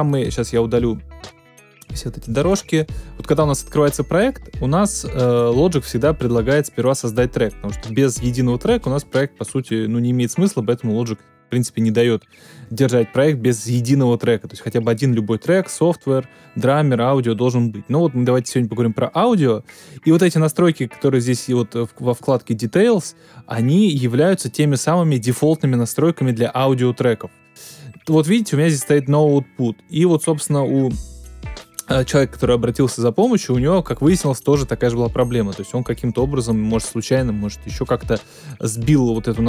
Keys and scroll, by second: 0.0 super+BackSpace, 2.8 super+BackSpace.